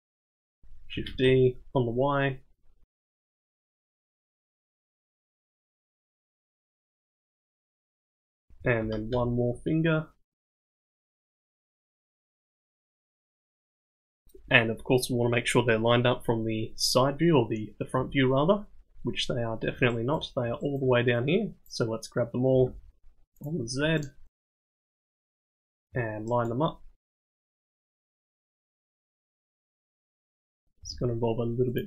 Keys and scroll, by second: 1.6 shift+d, 2.9 g, 4.7 g, 6.2 g, 7.1 g, 8.6 shift+d, 9.7-13.5 typing, 17.9 KP_1, 22.5 g, 24.8 g, 27.1 g, 28.1 g, 29.2 g, 30.1 g, 31.1-31.8 typing.